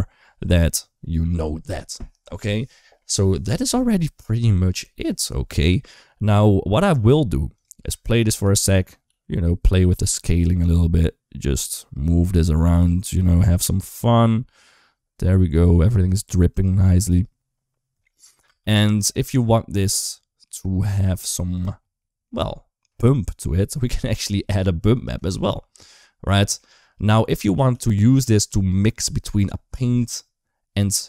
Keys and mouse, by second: 4.3 shift+middle click, 7.3 click, 7.8 space, 8.2 click, 9.0 s, 10.1 g, 15.8 s, 18.3 space, 20.7 click, 21.9 middle click, 26.2 shift+middle click, 26.7 click, 27.5 g, 28.4 shift+middle click, 28.7 g.